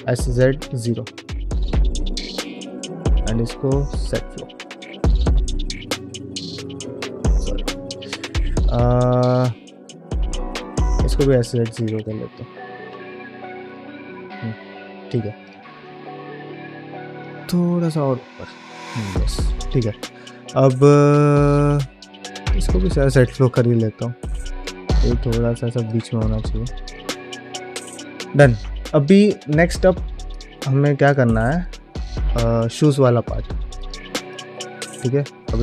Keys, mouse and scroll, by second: 1.4 middle click, 1.9 2, 2.3 alt+click, 2.8 q, 5.0 middle click, 5.4 g, 7.3 ctrl+z, 9.1 scroll up 1, 9.2 shift+middle click, 9.7 shift+middle click, 10.7 s, 12.6 g, 14.0 middle click, 14.0 scroll down 1, 14.4 ctrl+Tab, 14.8 scroll down 1, 15.0 middle click, 15.3 click, 15.6 shift+middle click, 15.8 middle click, 16.1-16.7 scroll up 2, 16.4 Tab, 16.9 g, 17.9 middle click, 18.3 ctrl+Tab, 18.7 click, 19.0 scroll down 1, 19.2 middle click, 19.5 shift+middle click, 19.8 scroll down 1, 19.9-20.6 middle drag, 21.5 Tab, 22.2 alt+click, 22.7 q, 23.4 middle click, 24.1 g, 25.9 middle click, 26.3 ctrl+Tab, 26.7 click, 26.9 scroll down 1, 27.1 middle click, 27.4 shift+scroll up 1, 27.5 shift+middle drag, 28.3 shift+middle drag, 30.0 click, 30.9 click, 31.4 click, 32.1 scroll down 1, 33.6 drag, 34.1 click, 34.7 middle drag, 35.3-35.6 scroll down 1.